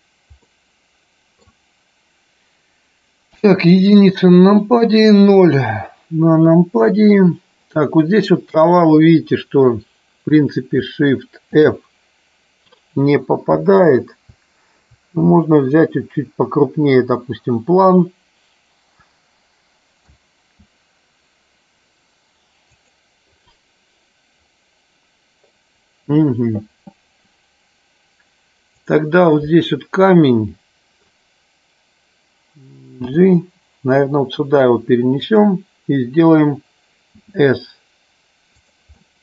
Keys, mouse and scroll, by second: 0.5-1.8 middle drag, 3.3 KP_1, 5.5 KP_0, 11.6 shift+f, 13.6 Down, 20.3 Right, 22.8 click, 28.6 click, 30.3-31.4 middle drag, 35.3 click, 38.7 click, 39.1-39.2 middle drag.